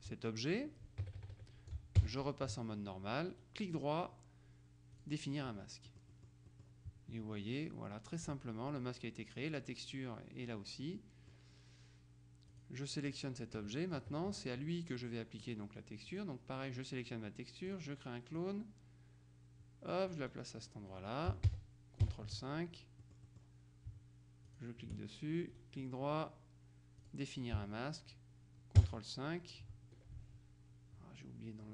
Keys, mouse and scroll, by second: 1.1 KP_Subtract, 2.1 ctrl+KP_5, 3.4 right click, 5.1 click, 6.0-7.2 middle drag, 10.9 middle click, 12.6 click, 13.7 KP_Subtract, 15.1-16.0 scroll up 2, 16.2 click, 17.8 click, 18.5-20.7 drag, 21.5 ctrl+KP_5, 23.1 middle click, 24.5 shift+click, 25.6 right click, 27.1 click, 28.9 ctrl+KP_5.